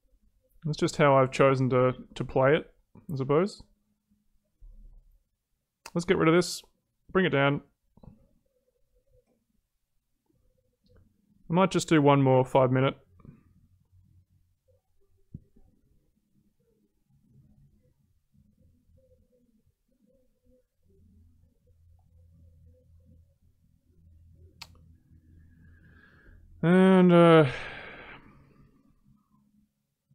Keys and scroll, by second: 2.0 ctrl+z.